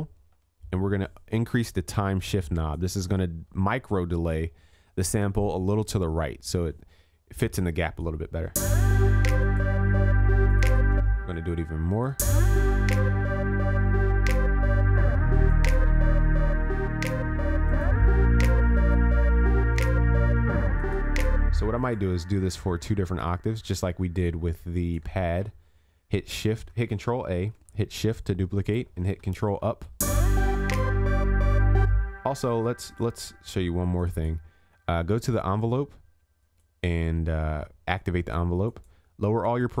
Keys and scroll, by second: 19.6 ctrl+s, 29.5 ctrl+Up.